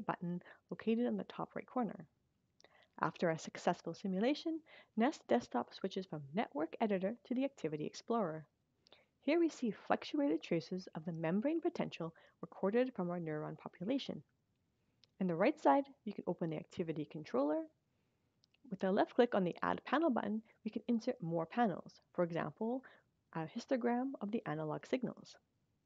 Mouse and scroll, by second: 0.5 click, 15.0-17.1 drag, 18.9 click, 23.6 click, 25.2 click.